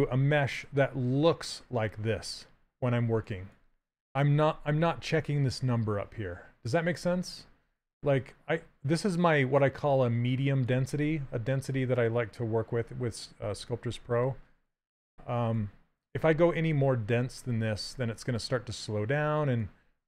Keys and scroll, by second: 0.3 shift+f, 15.1 s.